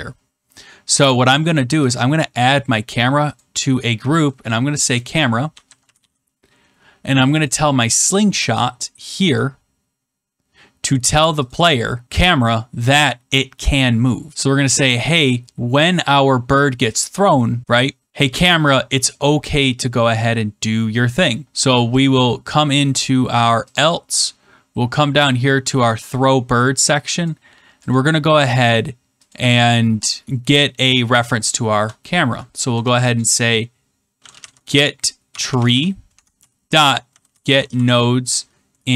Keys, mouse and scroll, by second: 1.9 click, 3.3 click, 4.9-6.4 typing, 7.4 click, 9.3 click, 11.4 click, 14.3 middle click, 18.6 click, 22.0 click, 23.7 click, 24.0 middle click, 27.1 click, 27.9 click, 29.2 click, 32.6 Return, 33.9-38.3 typing, 38.8 Right.